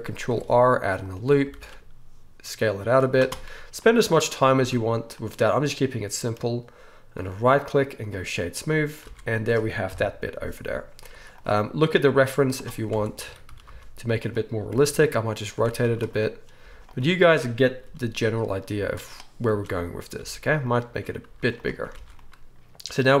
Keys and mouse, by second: 0.2 ctrl+r, 1.1-7.2 alt+middle drag, 1.5 alt+s, 4.6 Tab, 7.2-13.2 right drag, 9.0 alt+a, 9.9 KP_1, 11.1 z, 12.3 z, 12.9 Tab, 13.2 click, 13.2 a, 13.5 s, 13.6-20.2 right drag, 14.7 r, 15.6 Tab, 15.8 z, 16.6 z, 17.9 g, 18.8 z, 19.5 Tab, 20.2-23.2 drag, 20.2 s, 20.9 Tab, 21.3 z, 21.9 alt+a.